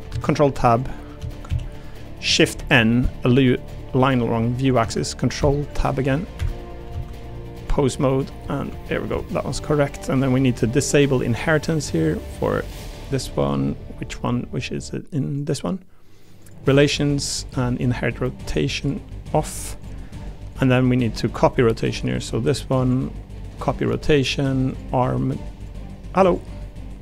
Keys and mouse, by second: 0.1 ctrl+Tab, 0.7 click, 1.2 Tab, 1.5 a, 2.5 shift+n, 4.8 ctrl+Tab, 6.9 ctrl+Tab, 8.1 click, 11.1 click, 15.3 click, 16.4 click, 18.8 click, 20.5 click, 22.1 click, 22.8-23.9 drag, 24.7 click, 24.9 a, 25.7 click.